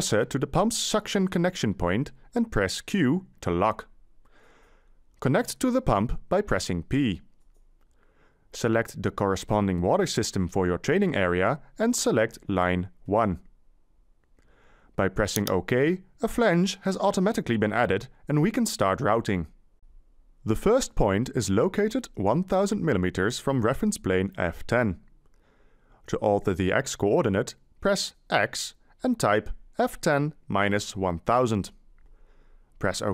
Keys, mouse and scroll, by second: 2.9 q, 6.8 p, 28.5 x, 29.4 Delete, 30.4-33.1 typing.